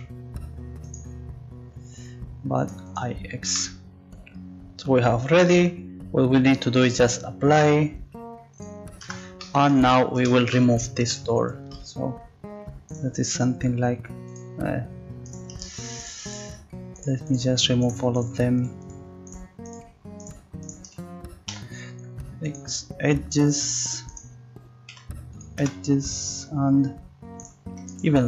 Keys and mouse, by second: 2.6-5.8 drag, 6.4-7.6 drag, 7.6 Tab, 9.1 Tab, 12.9-14.3 right drag, 16.0-17.5 drag, 17.5-22.6 right drag, 21.5 x, 24.1-25.6 right drag, 25.0 x, 25.6 z, 27.4-28.2 drag.